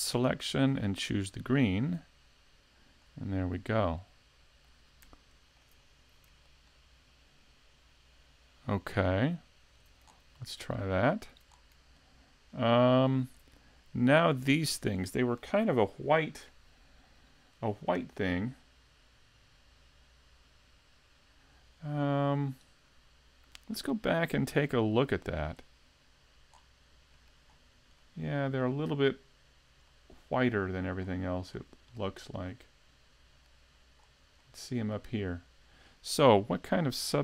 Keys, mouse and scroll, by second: 26.6-27.2 scroll down 3, 27.2 middle click, 27.2-27.6 scroll down 1, 27.6-28.1 scroll up 4, 28.1 middle click, 30.1 middle click, 31.1-32.0 scroll down 5, 32.0 middle click, 34.1-34.5 scroll up 4, 34.5 middle click.